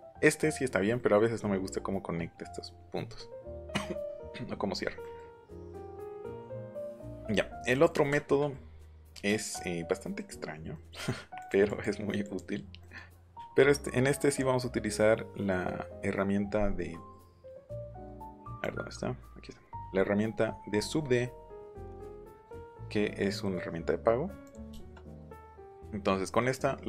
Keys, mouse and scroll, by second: 0.9 middle click, 1.2 scroll up 1, 2.8 middle click, 3.1 middle click, 4.3 middle click, 5.0-5.7 scroll up 2, 7.0-7.8 scroll up 2, 10.0 scroll up 1, 10.2 scroll down 1, 10.3-10.8 scroll up 2, 11.4 click, 11.6 click, 12.2 click, 12.8 middle click, 13.1 click, 16.9 middle click, 17.4 middle click, 18.5 right click, 20.4-21.1 scroll down 3, 21.8 click, 23.4 scroll up 1, 24.4 click, 24.7 shift+middle click, 25.1 scroll down 1, 25.3 middle click, 25.6 scroll up 1, 25.8 middle click.